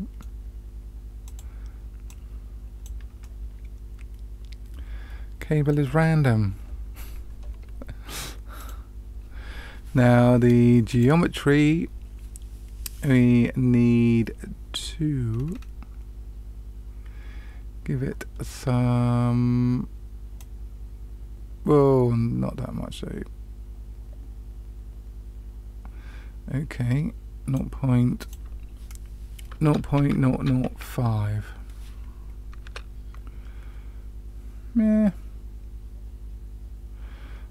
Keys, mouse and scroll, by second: 1.2 click, 2.0 click, 3.2-5.7 middle drag, 7.0-8.5 scroll down 1, 8.5 click, 10.9 click, 15.3 scroll down 1, 20.3-27.6 drag, 28.1-37.5 drag, 30.4 KP_0.